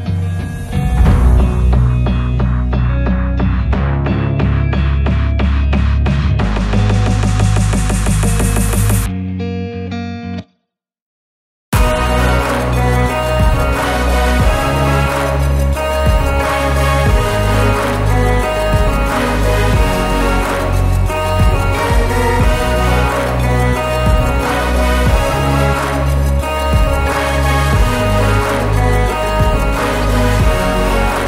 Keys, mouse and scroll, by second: 0.0 r, 1.6 g, 2.4 r, 3.4 click, 3.6 shift+drag, 3.8 shift+click, 3.9 shift+click, 4.4 g, 6.3 click, 6.4 shift+click, 6.6 shift+click, 6.8 shift+click, 7.0 g, 8.1 shift+click, 8.2 shift+click, 8.6 shift+click, 8.8 shift+drag, 9.0 g, 10.2 click, 11.0 scroll up 1, 11.2 shift+right click, 11.3 shift+a, 12.5-15.2 typing, 13.0 Tab, 14.6 click, 15.6 Tab, 16.1 click, 16.5 click, 16.7-17.2 scroll up 1, 17.2 click, 17.9 ctrl+2, 18.1 s, 19.3 scroll down 1, 19.4 g, 19.6 scroll up 2, 19.8 g, 20.6 g, 23.5 g, 24.2 scroll up 3, 24.4 shift+middle click, 24.6 s, 26.2 click, 26.3 scroll up 1, 26.5 s, 27.3 s, 27.9 g, 28.9 drag, 29.3 g, 30.1 shift+click, 30.5 drag, 30.7 scroll down 3, 30.9 Tab, 31.0 a.